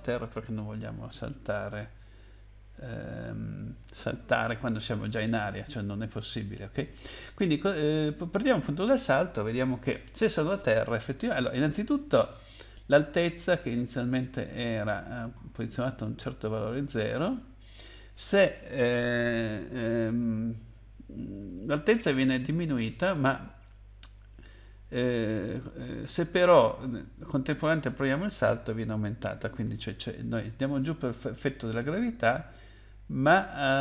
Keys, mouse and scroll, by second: 12.5 click, 14.5-15.0 scroll up 4, 15.5-15.9 scroll up 4, 17.2-18.1 scroll down 6, 23.4 scroll up 1, 24.0 scroll down 2.